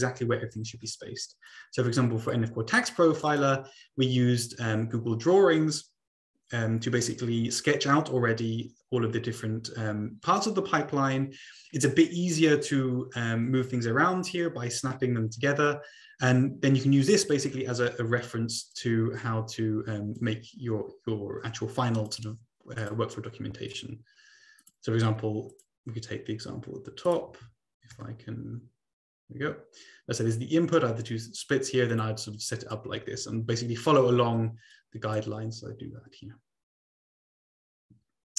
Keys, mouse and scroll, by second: 1.6 click, 3.3 click, 17.2-18.9 drag, 19.6 click, 20.2 click, 23.2 click, 23.8 click, 24.8 click, 26.2 click, 27.1 click, 27.7 scroll down 2, 28.2-29.5 shift+scroll up 3, 32.7 click, 33.2 ctrl+c, 33.4 ctrl+v, 35.2 click.